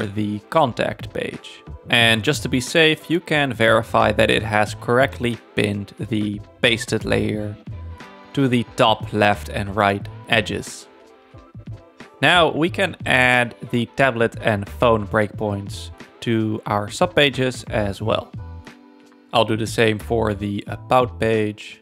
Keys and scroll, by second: 3.2 super+v, 9.3 super+-, 19.0 super+-.